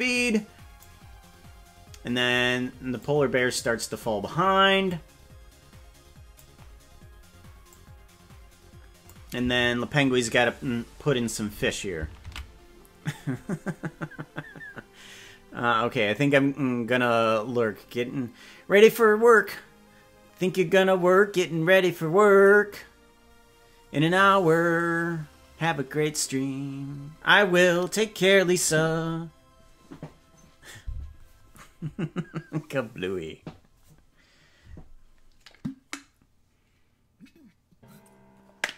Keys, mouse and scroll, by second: 3.0-4.0 drag, 4.9-6.4 drag, 7.6-9.1 drag, 13.8 ctrl+s.